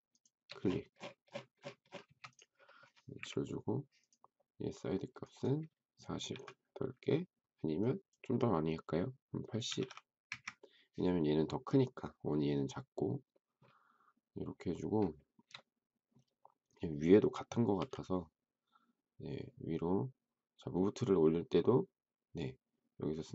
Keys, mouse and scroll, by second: 0.1 shift+click, 2.0 space, 3.1 Delete, 6.3 typing, 9.4-10.2 typing, 15.1 shift+middle click, 17.7 m.